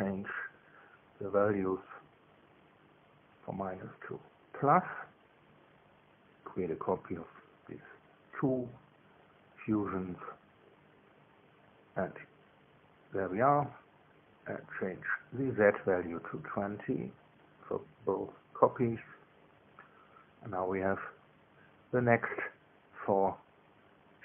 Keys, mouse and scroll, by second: 2.3 click, 3.1-4.0 typing, 4.4 Return, 6.0 click, 7.3 shift+click, 8.2 ctrl+c, 9.7 Return, 12.3 ctrl+v, 13.0 scroll down 1, 13.6 click, 14.8 click, 15.7 KP_2, 16.0 KP_0, 16.3 KP_Enter, 17.9-19.6 drag, 20.4 BackSpace, 21.2 Return, 23.0 click, 23.6 space, 24.0 click.